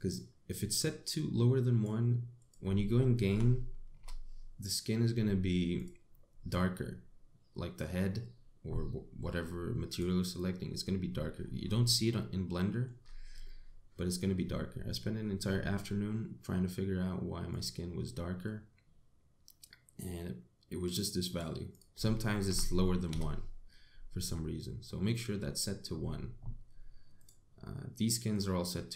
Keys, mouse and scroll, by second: 7.1 scroll up 3, 10.5 click, 12.3-12.6 scroll down 2, 12.6 middle click, 13.7-14.1 scroll up 2, 14.1 middle click, 16.0-16.4 scroll down 3, 18.1 click, 26.5-27.8 scroll up 7, 27.8 click.